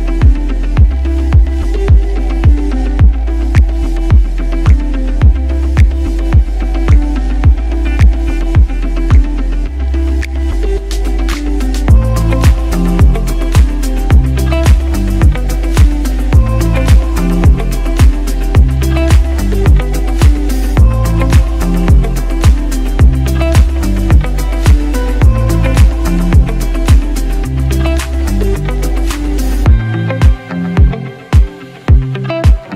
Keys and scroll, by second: 0.8 ctrl+shift+t, 3.2 ctrl+shift+Tab, 7.0 ctrl+a, 7.6 ctrl+c, 8.9 ctrl+d, 9.1 ctrl+v, 9.8 ctrl+alt+g, 9.8 ctrl+t, 16.9 alt+shift+Up, 17.1 alt+shift+Up, 18.5-19.2 typing, 21.7 v, 29.5 alt+BackSpace, 29.7 ctrl+d, 32.2 space.